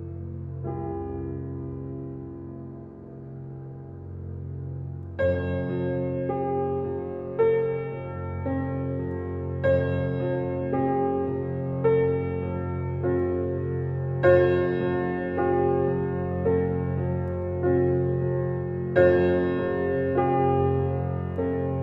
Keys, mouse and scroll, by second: 1.8 right click, 3.0 click, 9.9-11.4 right drag, 11.4 click, 12.3 r, 13.0-21.8 drag.